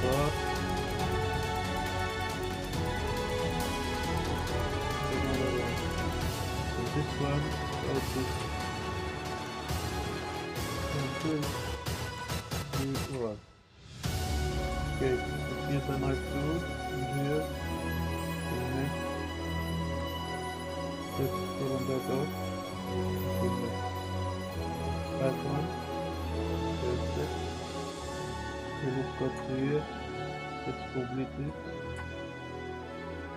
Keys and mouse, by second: 0.9-2.5 drag, 1.6 shift+middle click, 2.9-4.6 drag, 4.0 middle click, 4.7 middle click, 4.9-6.6 drag, 6.1-7.7 middle drag, 7.7-8.6 typing, 8.0 middle click, 10.2 click, 10.6 click, 10.8 z, 11.1 click, 11.9 shift+middle click, 12.1 shift+click, 12.3 z, 12.4 g, 12.5 x, 13.1 y, 14.3 click, 14.7 Tab, 14.8 click, 14.8 Tab, 16.8-18.5 drag, 19.6 click, 21.1 click, 22.3 click, 23.1 Tab, 25.1 click, 25.8-26.1 middle drag, 27.0-27.4 middle drag, 27.6 ctrl+r, 28.8 click, 29.4 shift+middle click, 30.0 middle click, 31.4 click, 32.0 shift+middle click, 32.4 click.